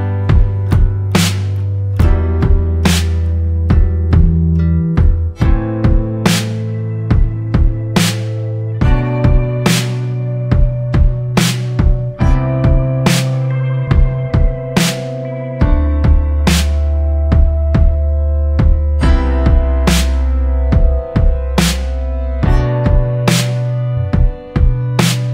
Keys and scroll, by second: 0.0 ctrl+z, 10.2 ctrl+z, 20.2 ctrl+z, 24.2 ctrl+z.